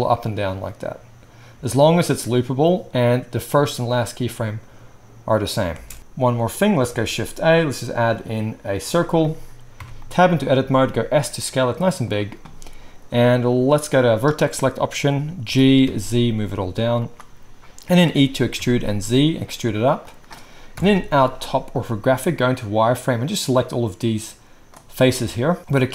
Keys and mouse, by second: 5.8 space, 6.0 ctrl+s, 6.9 shift+a, 9.8 Tab, 10.6 s, 12.1-13.9 drag, 15.4 g, 17.1 click, 18.0-22.6 right drag, 18.0 e, 20.7 KP_7, 21.0 z, 21.1-25.9 middle drag.